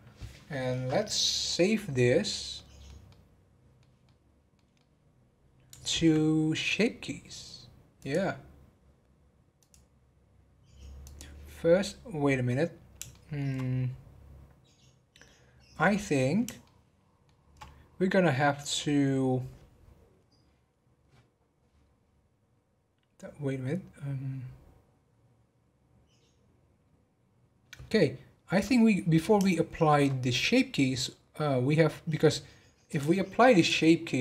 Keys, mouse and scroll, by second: 0.2-7.7 middle drag, 8.0 click, 9.5 click, 12.6 scroll down 2, 13.1-13.7 shift+middle drag, 13.7 scroll down 1, 16.6-19.7 shift+middle drag, 29.5-32.5 shift+middle drag, 32.9-34.2 drag.